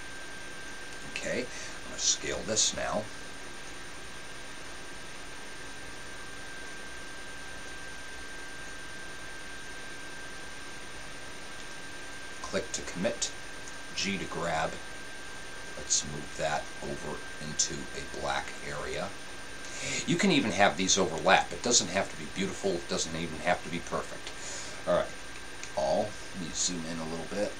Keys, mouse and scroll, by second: 2.6 s, 13.9 click, 13.9 g, 25.6 a.